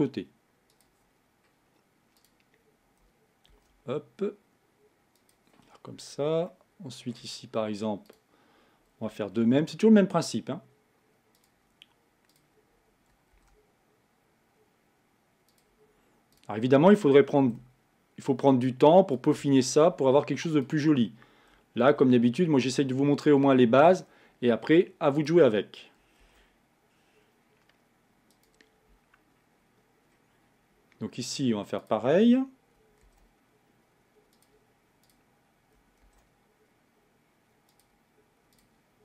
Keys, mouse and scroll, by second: 1.1-2.2 scroll up 3, 2.2-3.5 drag, 3.5 ctrl+a, 6.5-8.1 shift+middle drag, 8.1 click, 9.4 ctrl+a, 12.3 click, 13.4 ctrl+a, 16.4-17.5 drag, 17.5 ctrl+a, 20.6 click, 21.9 ctrl+a, 25.2 click, 26.2 ctrl+a, 29.4-30.7 scroll down 3, 30.7-31.8 scroll up 2, 31.8 click, 33.2 ctrl+a, 35.0-36.0 drag, 36.0 ctrl+a, 38.5-39.0 drag.